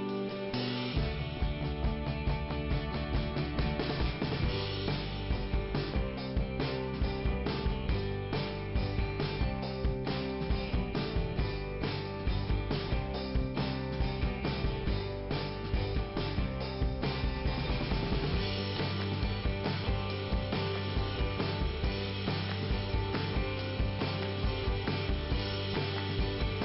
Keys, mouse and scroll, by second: 2.4 click, 2.7 scroll down 2, 6.7-7.8 scroll up 2, 11.3 click, 13.1 click, 13.9 click, 15.7 click, 15.8 click, 17.0 click, 18.5 click, 19.6 click, 25.4 click, 26.4 click.